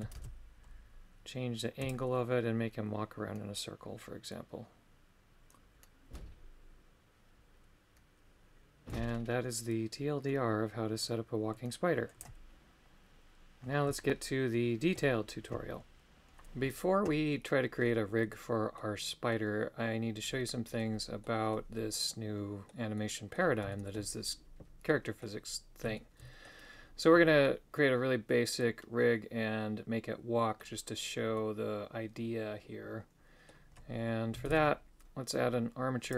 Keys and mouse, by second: 1.9-12.2 shift+drag, 14.2 shift+middle click, 18.4 middle click, 19.3-20.8 middle drag, 21.3 middle click, 22.1 middle click, 23.0 middle click, 23.7 shift+middle click, 24.9 middle click, 26.0 shift+middle click, 27.5-30.7 middle drag, 31.4-33.5 middle drag, 34.5 shift+a.